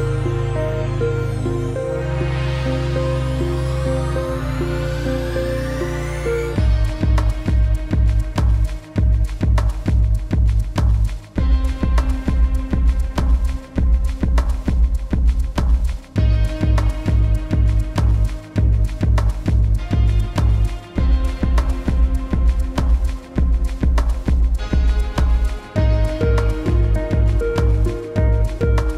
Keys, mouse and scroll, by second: 0.5 ctrl+shift+s, 2.8 super+s, 6.6 alt+click, 6.7 alt+scroll down 1, 7.0 space, 7.1 click, 7.2 space, 7.4 alt+scroll down 2, 7.6 space, 7.7 click, 7.8 space, 8.4 ctrl+v, 8.7 click, 9.3 space, 9.5 click, 9.7 space, 9.8-10.3 scroll up 2, 10.3 click, 10.7 space, 12.3 shift+super+s, 13.5 s, 16.0 click, 16.4 Tab, 17.0 scroll down 1, 17.2 space, 17.3 click, 17.4 space, 18.0 ctrl+space, 18.2 ctrl+v, 18.5 click, 19.0 scroll down 1, 19.3 click, 20.0 scroll up 1, 20.1 click, 20.4 alt+scroll down 1, 20.6 click, 21.0-21.4 alt+scroll up 2, 21.6 super+s, 24.2-25.0 alt+scroll down 3, 24.5 click, 24.7 space, 25.0 space, 25.1 click, 25.4 space, 25.6 v, 26.0 click.